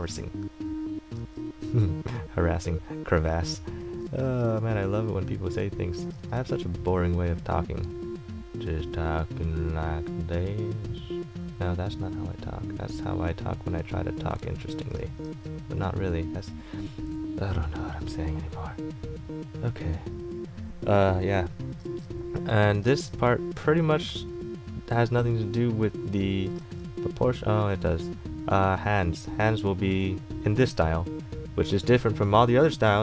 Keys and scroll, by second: 22.0 ctrl+z, 26.8 ctrl+z.